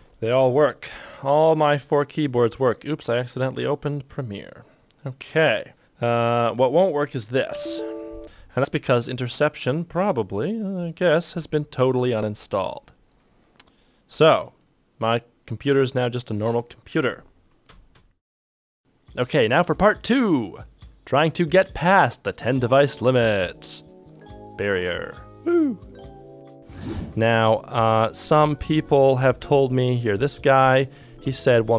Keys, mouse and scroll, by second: 0.0-0.2 typing, 0.2 shift+click, 0.8 shift+click, 2.9 shift+right click, 3.8 shift+right click, 3.9 shift+click, 5.1 shift+click, 5.7 shift+click, 8.2 Return, 17.6-18.5 typing, 26.9 ctrl+shift+Tab, 26.9 ctrl+click.